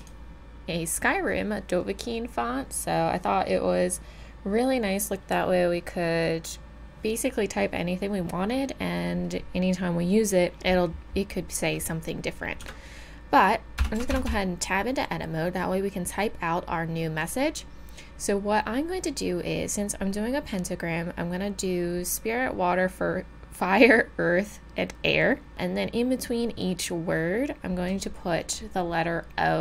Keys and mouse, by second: 0.0 click, 2.0 middle click, 3.6 middle click, 12.6 Tab, 13.8-14.1 BackSpace, 14.3 BackSpace.